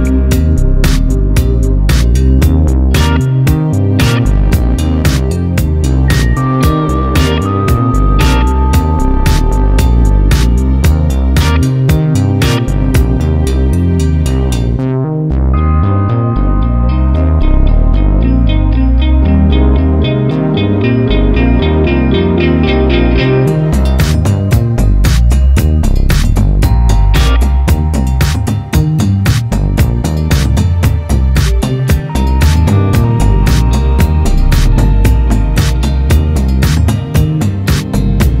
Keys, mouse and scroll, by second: 2.2 alt+a, 2.3 `, 3.2 click, 6.2 a, 6.4 click, 6.8 space, 8.2 Escape, 9.5 click, 9.8 a, 9.9 space, 15.3 click, 15.7 right click, 16.5 `, 18.4 click, 19.6 click, 20.1 KP_Decimal, 20.3 scroll up 1, 20.6 `, 20.9 scroll down 1, 21.3 scroll up 1, 21.5 1, 21.9 `, 22.6 Tab, 22.8 alt+a, 23.0 `, 23.4 click, 24.0 alt+a, 26.7 click, 27.1 KP_0, 27.4 scroll up 1, 31.0 click, 31.5-33.8 scroll down 1, 33.8 click, 37.4-38.4 drag.